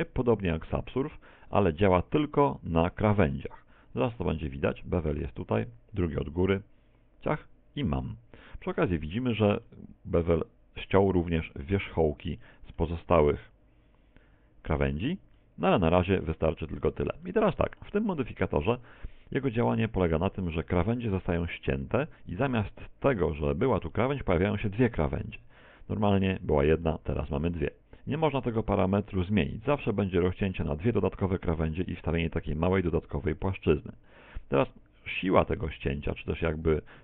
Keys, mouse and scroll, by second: 4.2 click, 9.7 middle click, 12.4 middle click, 15.4 middle click, 16.5-16.9 scroll up 1, 17.3 shift+middle click, 17.3 scroll up 2, 23.3 middle click, 25.4 Tab, 26.2 middle click, 33.5 Tab, 35.5 middle click.